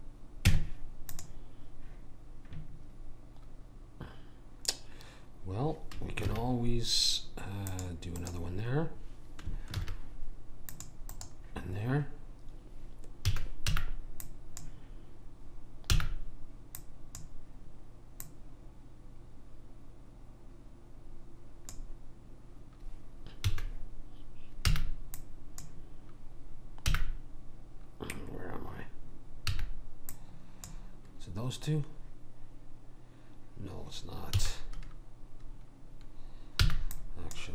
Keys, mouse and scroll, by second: 0.5 Tab, 6.3 ctrl+r, 9.8 ctrl+r, 13.3 a, 13.7 b, 15.9 b, 18.2 click, 23.4 a, 24.7 b, 27.0 b, 34.3 a, 36.6 b.